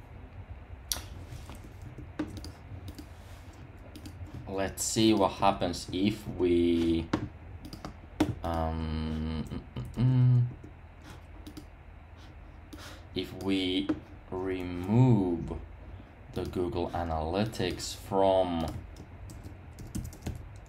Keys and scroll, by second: 1.8 super+§, 5.4 super+§, 9.9 super+§.